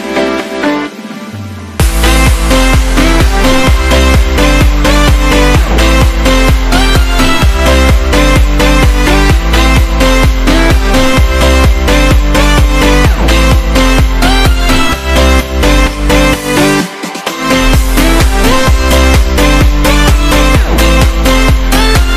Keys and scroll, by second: 2.9 super+z, 3.7 alt+super+z, 4.3 alt+super+z, 7.0 super+-, 7.5 super+-, 8.0 super+-, 8.6 super+-, 9.6 super+-, 10.2 super+=.